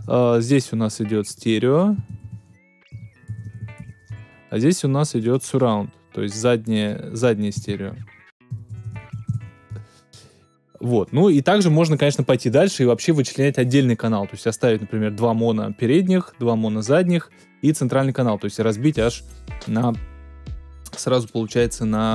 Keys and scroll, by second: 1.9-4.2 typing, 4.8 Return, 7.5-9.8 typing, 10.5 Return.